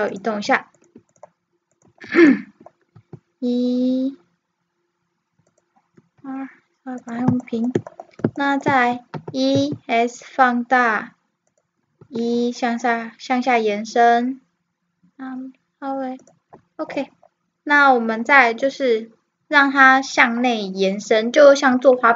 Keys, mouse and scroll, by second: 0.8-4.0 right drag, 3.0 e, 6.0 r, 7.5 middle click, 7.7 middle click, 8.2 middle click, 8.6 middle click, 9.1 e, 12.0 e, 16.9-20.7 middle drag.